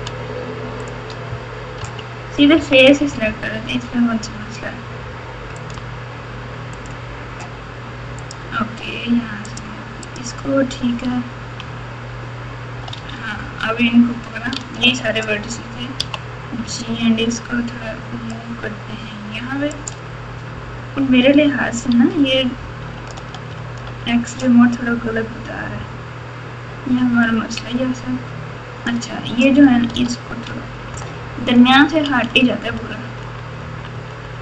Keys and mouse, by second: 1.8 3, 2.5 KP_3, 5.6 click, 8.2 shift+click, 9.5-11.0 shift+drag, 11.6 KP_1, 12.9 alt+z, 14.5 alt+z, 15.9 g, 21.9 1, 23.5 alt+z, 27.3-28.8 drag, 29.9 g.